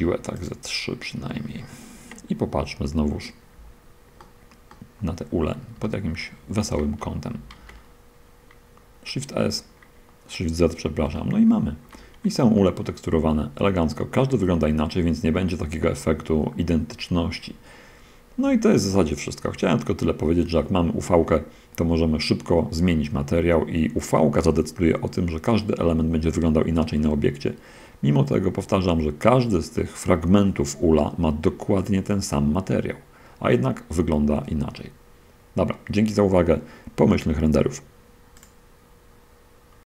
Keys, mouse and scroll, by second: 0.1 3, 0.7 click, 2.9 1, 4.5-5.5 middle drag, 5.5-6.0 scroll up 1, 6.1 shift+middle click, 6.9 shift+a, 9.9-10.3 scroll up 1, 11.4 shift+middle click, 12.6-14.4 middle drag, 19.2 shift+middle click, 38.7 click.